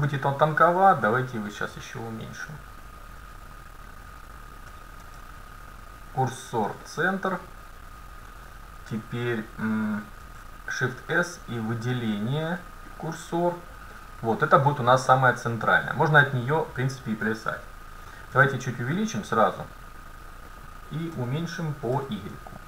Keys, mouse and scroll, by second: 0.6-2.5 drag, 2.5-4.4 middle drag, 5.1 shift+s, 10.3 shift+s, 13.0 shift+s, 14.0-17.1 middle drag, 17.1 scroll up 1, 17.4 middle click, 18.4 s, 21.2 s.